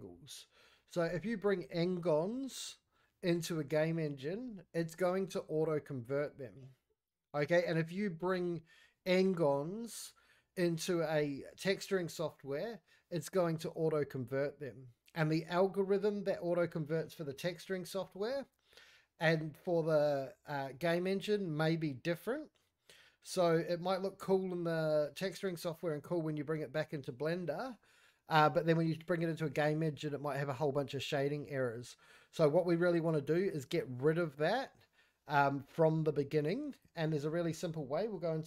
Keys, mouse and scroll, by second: 36.7 click, 37.0 scroll down 4, 37.3 shift+middle drag, 37.6 scroll up 2, 37.8-38.2 middle drag.